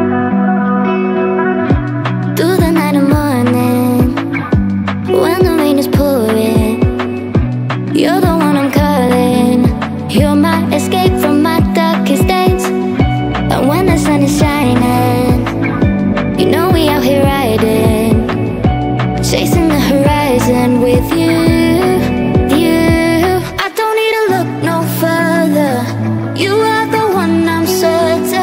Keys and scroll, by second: 21.2 Down.